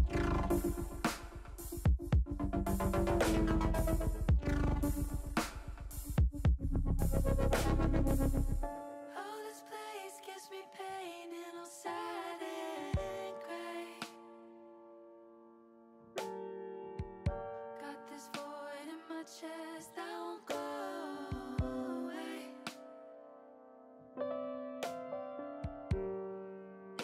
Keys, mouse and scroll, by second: 0.4 click, 1.4 Tab, 3.1-5.7 drag, 6.5 click, 7.9 click, 10.0 middle click, 12.0 shift+middle click, 12.7 middle click, 13.7 middle click, 15.6-16.7 middle drag, 17.6 middle click, 19.6 click, 20.2 middle click, 21.5 Tab, 22.4 KP_1, 24.8 click, 25.7 shift+click.